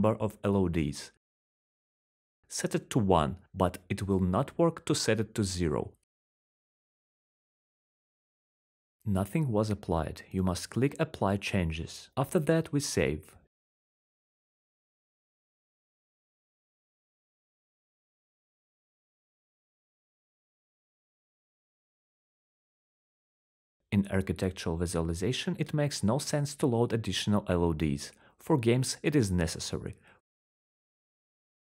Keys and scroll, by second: 2.0 1, 2.8 0, 3.0 Return, 4.7 1, 5.1 Return, 7.2-9.5 typing, 12.2-12.8 s, 12.9-13.4 w, 13.6 s, 22.4-23.4 typing, 23.5 Return.